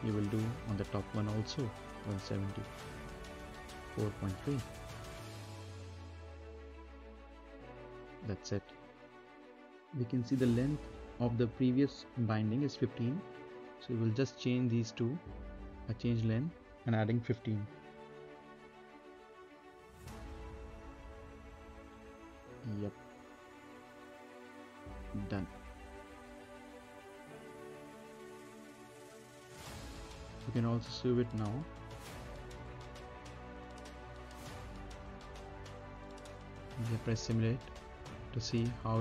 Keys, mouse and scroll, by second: 0.7 click, 1.8-2.3 typing, 3.5 typing, 5.2-5.9 typing, 5.9 click, 8.6 middle click, 8.9-9.3 scroll down 1, 9.3 middle click, 10.3 click, 11.4 middle click, 13.0 click, 13.7 middle click, 14.7 right click, 15.9 click, 16.6-17.8 typing, 17.9 click, 19.8 middle click, 20.7 click, 21.1 right click, 22.6 click, 23.5-24.2 typing, 24.9 click, 27.0 scroll up 1, 27.3 middle click, 27.7-28.2 scroll down 1, 28.2 n, 29.0 click, 30.5-31.7 scroll up 1, 31.7 space, 34.2 scroll up 1, 34.9 right click, 35.2 space, 36.0-36.4 scroll up 1, 37.2 middle click, 37.7 scroll up 1, 37.9 right click, 38.5 middle click.